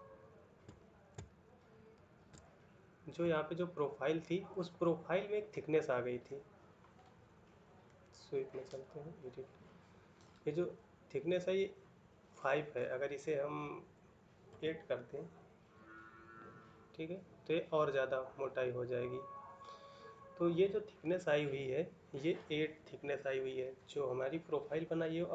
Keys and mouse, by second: 0.6 shift+middle click, 1.6 ctrl+middle click.